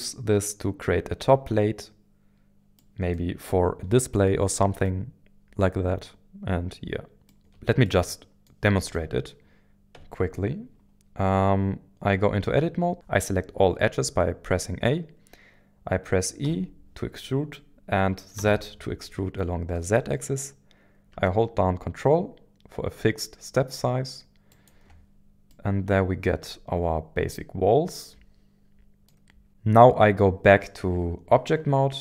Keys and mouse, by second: 2.8-3.2 middle drag, 7.3 shift+middle drag, 7.8-8.5 middle drag, 8.8 shift+middle click, 9.9 Tab, 16.4 e, 18.4 z, 24.5 ctrl+click, 25.5-29.1 middle drag, 29.5 Tab.